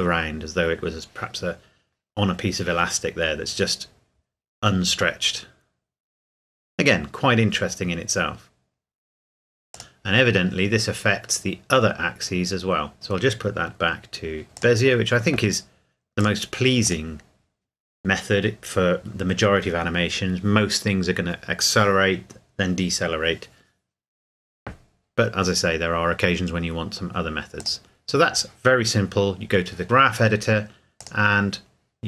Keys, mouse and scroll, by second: 9.7 click, 12.9 click, 14.5 click, 27.6 click, 31.0 click.